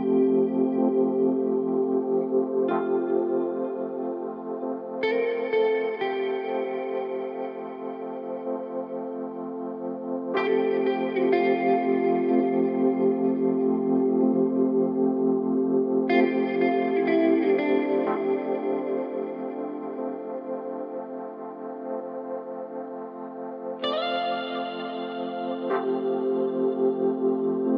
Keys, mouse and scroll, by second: 5.5 click, 6.6-8.5 scroll up 3, 8.5-9.1 scroll down 1, 9.1-9.6 scroll up 1, 9.6 scroll down 1, 11.1-11.7 scroll down 1, 11.7-12.2 drag, 14.0-17.1 drag, 17.2 click, 18.6-19.6 middle drag, 19.6 click, 20.1-20.6 scroll up 3, 20.6 middle click, 20.8 drag, 21.4-25.3 middle drag, 21.7-24.7 drag, 26.1-27.7 middle drag.